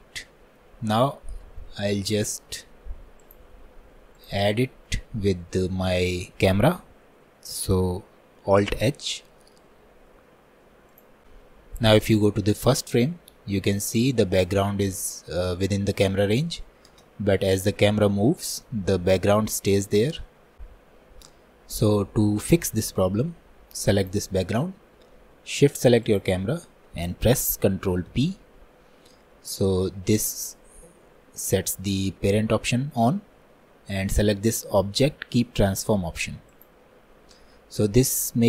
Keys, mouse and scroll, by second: 0.0 middle click, 0.8-1.2 scroll up 2, 1.2-3.3 shift+middle drag, 3.3-4.3 drag, 4.5-5.0 scroll down 1, 5.0-14.2 middle drag, 14.2-20.1 drag, 24.2 click, 26.2 shift+click.